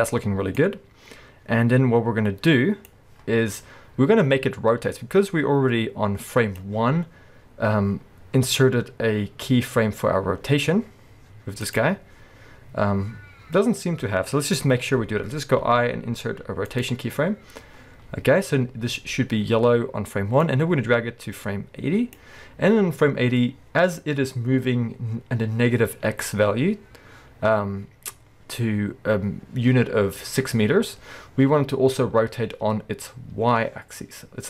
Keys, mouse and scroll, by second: 0.6-11.8 drag, 15.6 i, 20.5-34.4 drag.